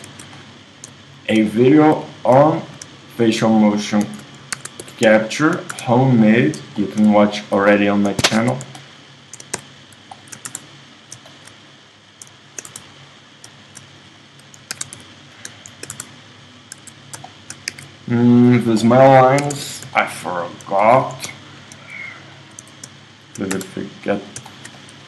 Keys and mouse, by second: 2.6-4.5 middle drag, 4.1 super+z, 4.5 ctrl+Tab, 4.5-6.8 super+drag, 5.7 space, 7.0 super+click, 8.8 click, 10.5 space, 11.0 click, 12.7 space, 14.8 ctrl+Tab, 15.9 click, 15.9 space, 16.8 Tab, 17.8 Tab, 19.7 ctrl+Tab, 21.0 z, 22.6 z, 23.6 space.